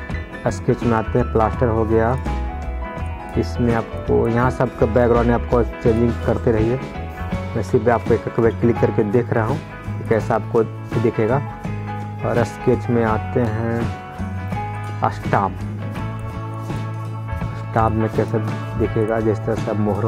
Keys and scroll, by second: 8.3 ctrl+z.